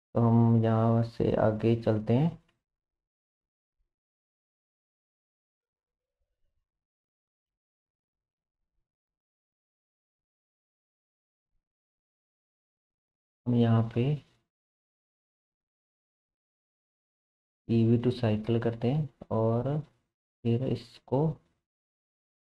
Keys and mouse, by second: 2.6-13.8 drag, 7.4 space, 13.8 middle click, 13.9-17.3 drag, 17.3-22.5 middle drag.